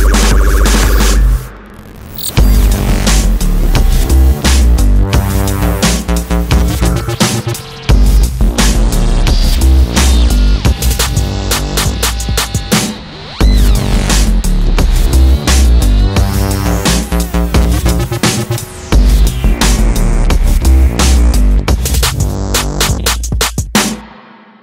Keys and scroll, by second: 5.1 Escape, 16.0 F5.